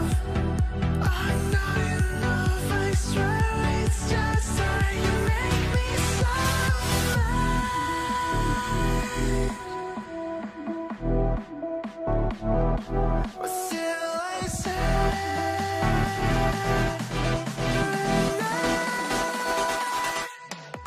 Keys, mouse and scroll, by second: 8.0 shift+click, 8.9 shift+click, 9.6 shift+click, 10.4 shift+click, 11.5 shift+click, 12.9 shift+click, 13.8 shift+click.